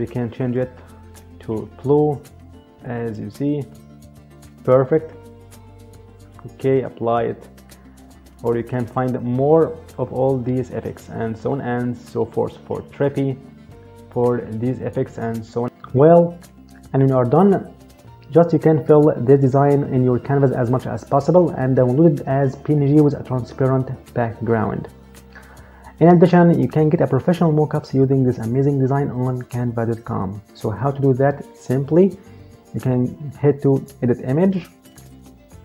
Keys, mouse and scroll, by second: 0.4 click, 6.8 click, 8.8 click, 34.2 click.